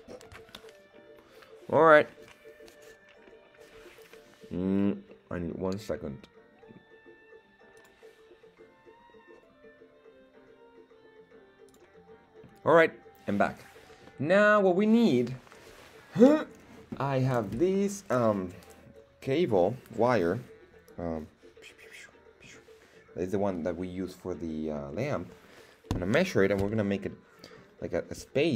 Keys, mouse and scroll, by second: 14.1-14.8 middle drag.